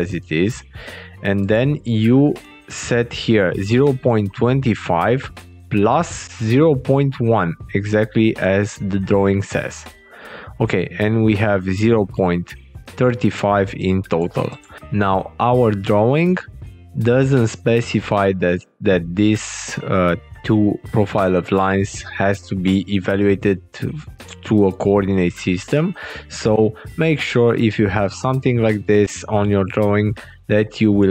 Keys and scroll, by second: 5.8 alt+Tab, 9.7 alt+Tab, 26.4 alt+Tab.